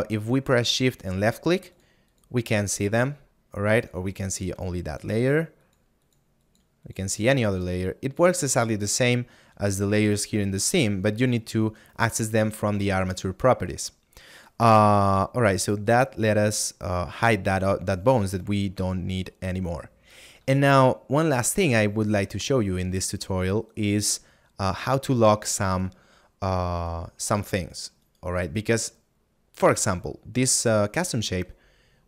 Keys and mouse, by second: 1.0 shift+click, 5.0 shift+click, 18.8 middle click, 20.9 middle click, 24.3 click, 25.8 right click.